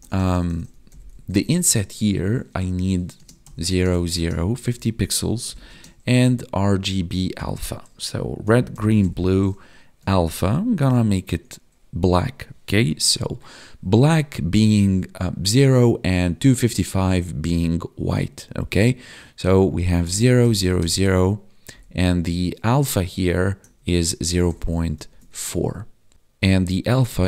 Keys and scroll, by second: 3.1 space, 3.7 space, 4.1 space, 5.6 space, 25.0 ctrl+s.